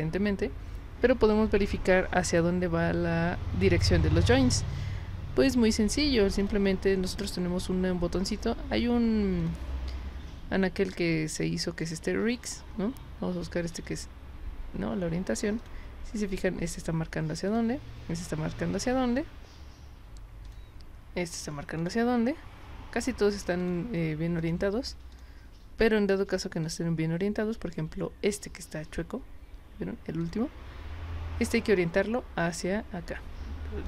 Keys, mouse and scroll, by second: 6.4 click, 7.2 click, 9.4 click, 13.7 click, 15.6 click, 16.3 click, 17.5 click, 18.7 click, 20.5 click, 21.8 click, 23.6 click, 24.4 click, 25.1 click, 26.7 click, 30.2 click, 31.4 click.